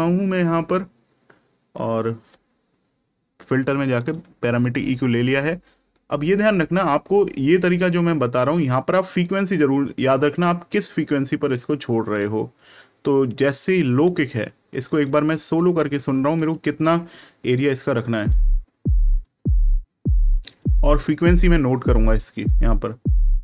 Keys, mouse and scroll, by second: 3.9 click, 9.2 click, 16.3 right click, 18.1 click, 22.4 click.